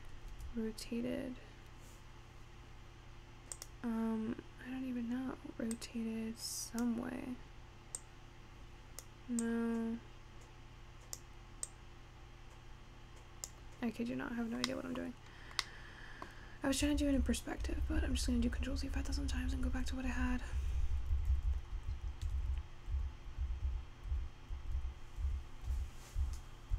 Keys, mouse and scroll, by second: 0.4 r, 5.8-14.4 drag, 14.4-14.8 scroll up 3, 14.8 middle click, 15.2-15.8 scroll down 4, 15.8 middle click, 16.5-17.1 scroll down 2, 17.1 ctrl+z, 17.3-18.5 ctrl+z, 18.6 ctrl+z, 18.8-19.4 ctrl+z, 19.5 ctrl+z, 19.7 ctrl+z, 20.0 ctrl+z, 20.2 ctrl+z, 20.6 ctrl+z, 20.8 ctrl+z, 21.0 ctrl+z, 21.2 ctrl+z, 21.4 ctrl+z, 21.6 ctrl+z, 21.9-22.4 scroll up 4, 22.4 ctrl+z, 22.5 ctrl+z, 23.0 ctrl+z, 23.5 ctrl+z, 23.7 ctrl+z, 24.2 ctrl+z, 24.8 ctrl+z, 25.3 ctrl+z, 25.8 ctrl+z, 26.3 ctrl+z.